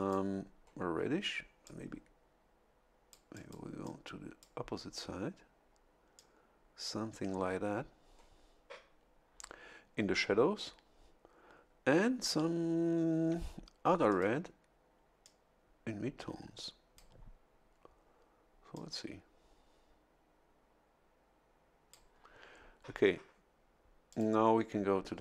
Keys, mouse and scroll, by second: 1.6-3.3 drag, 3.8 click, 6.1 click, 14.1 click, 15.2-17.3 drag, 18.7-22.1 drag, 24.1 click.